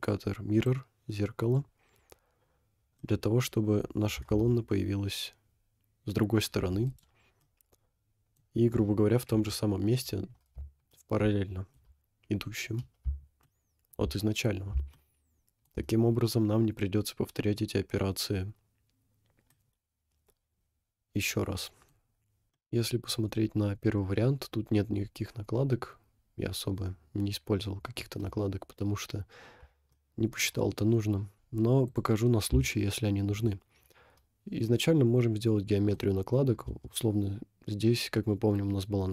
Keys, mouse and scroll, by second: 0.6 click, 2.0-2.4 scroll down 3, 2.8 scroll up 1, 3.0 middle click, 4.2 g, 7.4 middle click, 9.3 KP_1, 10.3 scroll up 1, 10.9 shift+middle click, 12.4 scroll up 1, 13.6 shift+middle click, 14.7-15.8 shift+middle drag, 16.0 scroll down 2, 17.3 scroll up 1, 19.5-21.9 middle drag, 22.5-23.1 middle drag, 22.5 scroll up 3, 23.9-25.1 middle drag, 27.6 middle click, 30.0-30.4 shift+middle drag, 31.9 click, 32.7 shift+middle click, 33.4 click, 33.6 scroll up 2, 34.6-36.0 middle drag, 36.3 scroll up 2, 36.8 Tab.